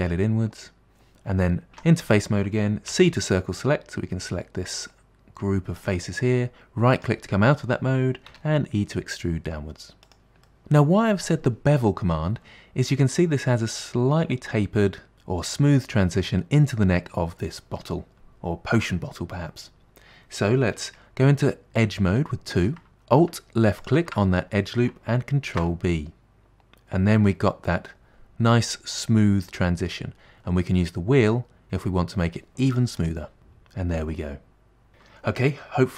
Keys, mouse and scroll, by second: 1.8 3, 3.0 c, 8.4 e, 10.5 middle click, 22.7 2, 23.9 alt+click, 25.5 ctrl+b, 33.1 click, 33.4-34.9 middle drag.